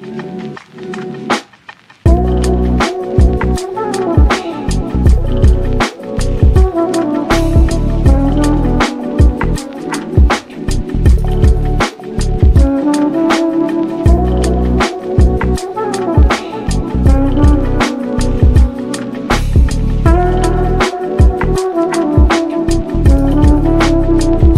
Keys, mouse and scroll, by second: 0.3-1.0 scroll up 2, 1.0 click, 1.1 scroll down 2, 1.2 shift+middle click, 1.5 ctrl+s, 4.0 ctrl+s, 4.3 click, 4.7-5.1 scroll down 1, 5.1 ctrl+s, 5.3 click, 5.8 KP_3, 6.4 shift+d, 7.1 s, 8.0 g, 9.0-9.5 middle drag, 9.5-10.0 scroll up 1, 10.0 g, 12.2 click, 13.3-13.7 scroll up 9, 13.8 click, 14.2 g, 16.2-16.6 scroll down 9, 16.9 click, 17.1 scroll down 1, 17.4 middle click, 17.6 ctrl+s, 17.7-18.1 scroll down 1, 18.1 click, 18.8-20.7 drag, 20.7 ctrl+s, 20.8 click, 21.6-22.2 scroll down 1, 22.2 drag, 22.6-23.3 scroll down 12, 23.3 drag, 23.5-24.5 scroll down 1.